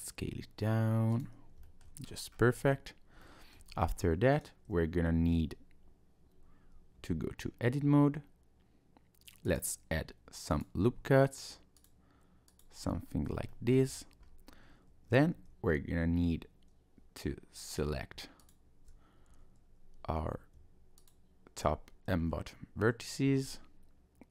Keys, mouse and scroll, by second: 0.2 s, 1.6 shift+middle click, 2.0-3.2 scroll up 4, 3.2 shift+middle click, 3.7-4.3 scroll down 1, 7.0 Tab, 9.5 click, 10.5 click, 10.8-11.8 scroll up 1, 11.8 click, 12.5 click, 12.8-13.4 scroll up 1, 13.5 shift+middle click, 13.9-14.4 scroll up 3, 14.4-14.9 scroll down 1, 14.9 Tab, 15.3 Tab, 17.6 click, 18.4 alt+click, 21.0 alt+shift+click, 22.3 s.